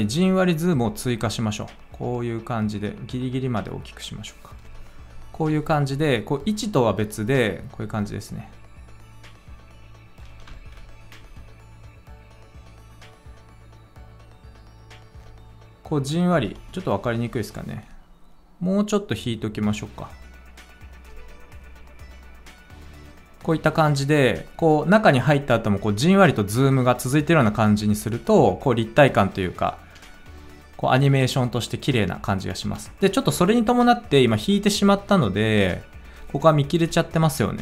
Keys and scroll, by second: 10.4 ctrl+z, 11.1 space, 16.5 space, 22.0 space, 32.6 space.